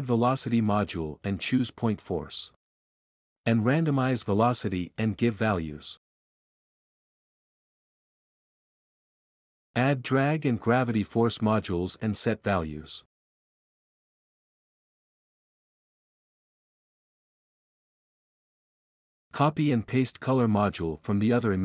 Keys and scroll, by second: 4.6-6.5 typing, 8.4-9.4 typing, 10.6-11.7 typing, 13.3-14.3 typing, 15.9 BackSpace, 16.0 BackSpace, 20.2 ctrl+c, 20.8 ctrl+v.